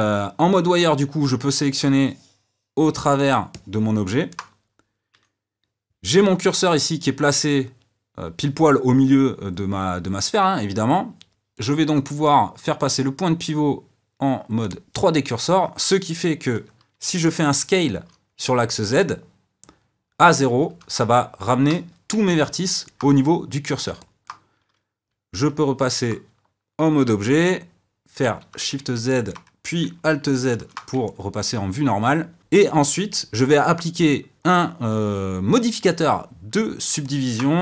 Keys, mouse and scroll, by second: 1.8 click, 3.5-5.1 middle drag, 5.1 KP_1, 11.9-14.9 drag, 22.2-25.3 middle drag, 25.3 Tab, 28.2 shift+z, 29.1-30.6 middle drag, 30.6 alt+z, 31.0-32.4 middle drag, 37.0-37.6 middle drag.